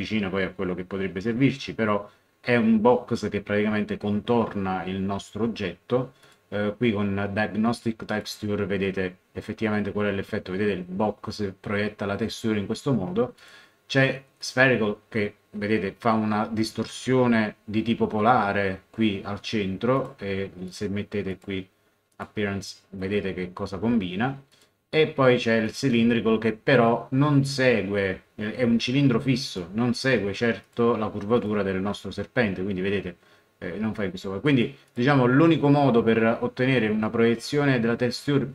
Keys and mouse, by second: 6.2 click, 8.1 click, 13.3 click, 19.9 click, 24.5 click, 25.6 click, 29.4 click, 34.4 click.